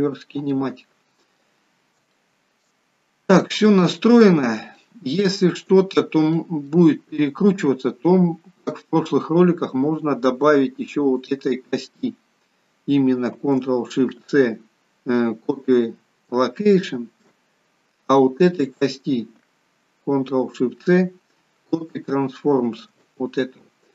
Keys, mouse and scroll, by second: 0.5 middle click, 2.2 shift+middle click, 3.0 scroll up 2, 3.5 middle click, 4.4 scroll down 2, 4.8 middle click, 6.0-6.4 scroll up 3, 6.4 middle click, 7.0 shift+middle click, 11.2 click, 12.4-13.4 scroll down 1, 14.2 ctrl+shift+c, 17.1 ctrl+shift+c, 18.7 click, 20.4 ctrl+shift+c, 23.0 c.